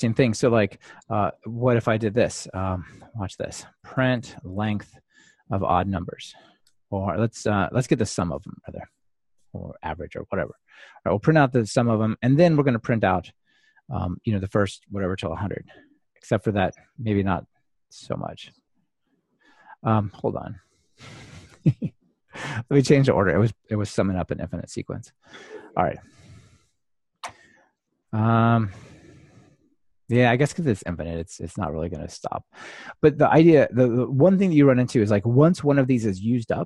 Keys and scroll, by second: 6.7 Return, 8.2 ctrl+alt+shift+Left, 10.3 Escape, 15.8 ctrl+r, 21.1 super+F2, 25.2 super+v.